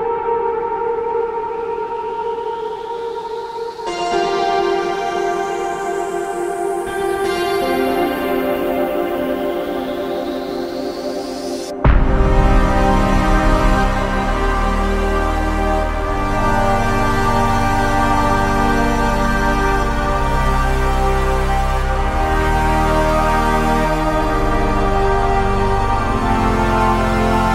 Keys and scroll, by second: 0.4 Escape, 18.4 Escape, 21.2 F3.